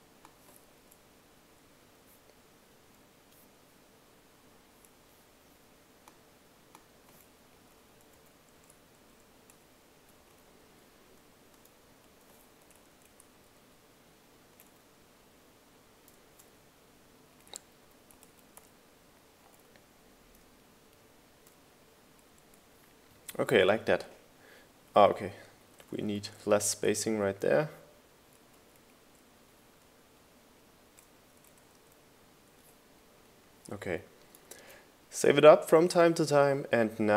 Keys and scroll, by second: 2.6 Down, 3.6 Down, 3.7 Up, 4.7 Up, 9.5 Down, 10.0 Up, 10.3 Right, 12.2 Down, 14.5 Right, 15.2 Left, 16.5 Up, 19.3 Up, 20.1 Down, 20.5 Up, 21.4 Down, 24.1 Right, 27.6 Left, 28.5 Up, 28.9 Left, 29.1 Down, 30.5 Left, 31.2 Right, 33.4 Right, 35.2 Right.